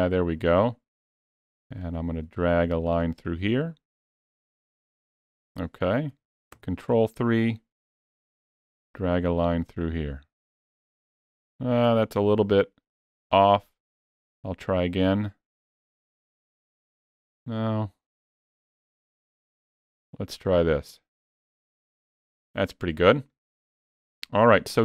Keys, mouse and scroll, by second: 1.6 click, 6.3 ctrl+KP_3, 8.5 click, 11.8 ctrl+z, 13.7 click, 16.9 ctrl+z, 18.7 click.